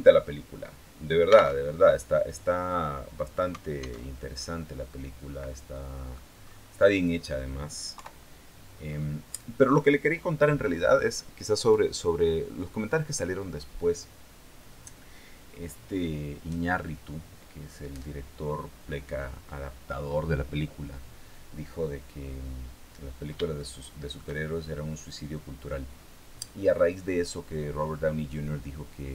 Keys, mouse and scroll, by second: 1.3 alt+Tab, 3.8 alt+Tab, 4.1 alt+scroll down 1, 4.7-6.1 middle drag, 6.3-6.9 scroll up 2, 7.7 KP_3, 8.7 scroll up 2, 22.3-22.6 scroll up 2, 23.3 shift+middle click, 24.2-25.3 shift+scroll up 3, 25.3-25.7 scroll down 4.